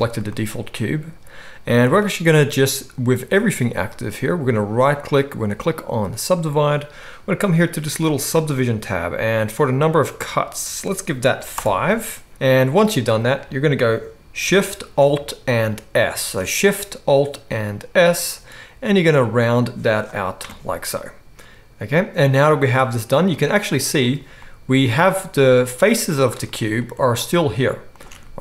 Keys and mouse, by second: 4.8-7.9 right drag, 8.0 click, 8.0 middle click, 8.0 right click, 12.6-14.4 drag, 12.6-14.4 middle drag, 12.6-14.4 right drag, 16.1 alt+shift+s, 20.2-24.0 right drag, 24.0-25.5 middle drag, 25.5 shift+right click, 26.1 ctrl+shift+middle click, 26.2 ctrl+shift+click, 26.3-28.4 shift+right drag, 27.2 ctrl+shift+click, 27.2 ctrl+shift+middle click, 28.0 ctrl+shift+click, 28.0 ctrl+shift+middle click.